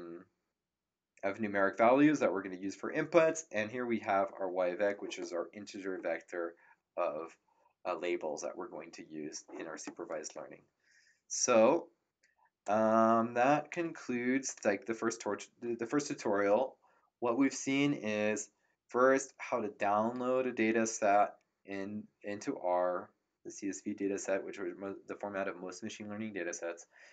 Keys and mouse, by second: 12.6 click.